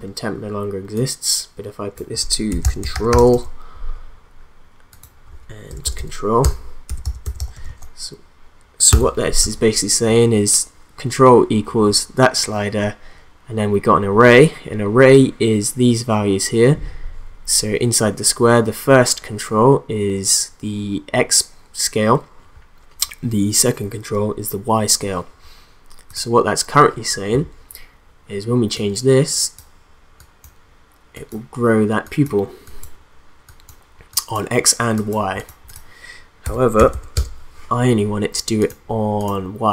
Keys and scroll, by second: 2.3-3.8 typing, 5.7-8.9 typing, 36.3-37.2 typing.